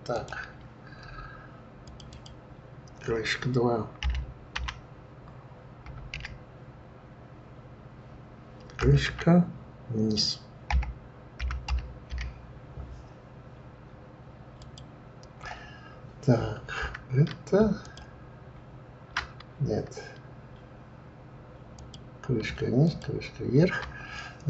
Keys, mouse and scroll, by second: 0.1 click, 1.8 click, 2.1-5.1 drag, 17.8 ctrl+click, 21.7 click, 22.8 ctrl+click.